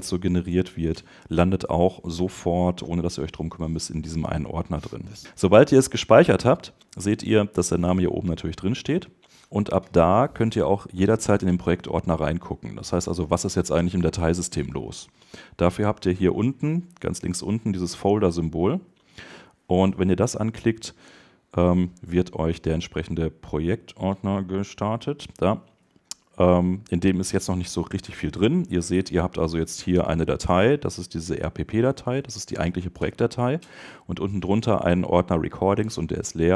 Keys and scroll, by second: 34.7 Right, 35.5 Left.